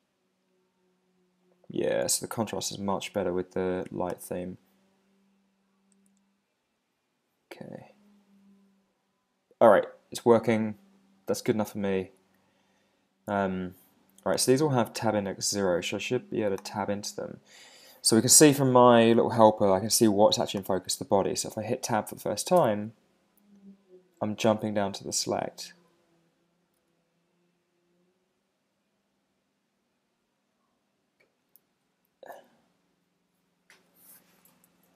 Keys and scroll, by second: 22.6 Tab, 26.8 Tab, 29.2 Tab, 34.7 super+Right.